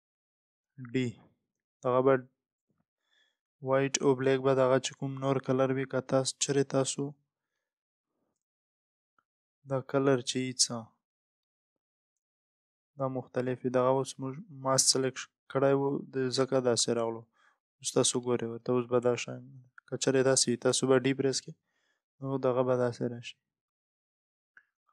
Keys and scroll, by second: 9.0 Return, 13.2 Return, 19.8 Return, 20.6 Return.